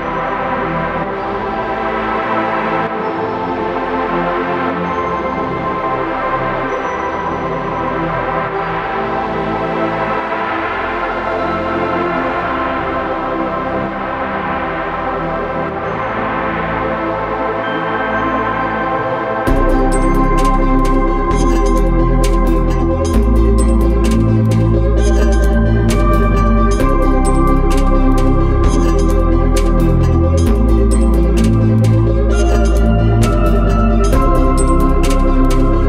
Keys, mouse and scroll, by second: 1.9-2.6 scroll up 1, 3.7 click, 4.2 scroll down 1, 5.1 Escape, 6.2 click, 6.6-6.9 scroll up 1, 8.5 middle click, 8.9-12.2 scroll up 1, 12.2 Escape, 12.4 click, 16.5 click, 21.4 click, 23.7 Escape, 24.4 middle click, 25.1 scroll down 1, 26.3 l, 27.1-28.2 scroll down 1, 33.9 click, 34.2-34.6 scroll up 1, 35.3-35.8 scroll down 1.